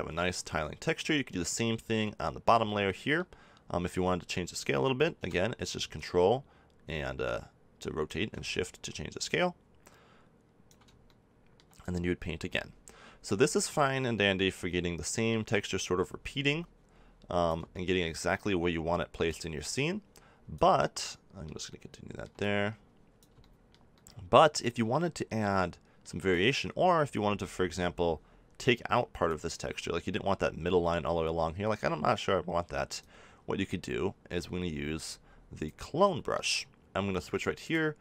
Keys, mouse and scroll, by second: 5.9-7.8 drag, 8.4-10.2 drag, 11.0 middle click, 11.8-13.7 drag, 13.7-15.6 middle drag, 15.6-17.4 drag, 17.7-19.2 middle drag, 19.2-21.2 drag, 21.2-22.4 middle drag, 22.4-28.1 drag, 30.8-32.9 middle drag, 32.9-36.0 drag, 36.0-37.6 middle drag, 37.6-38.0 drag.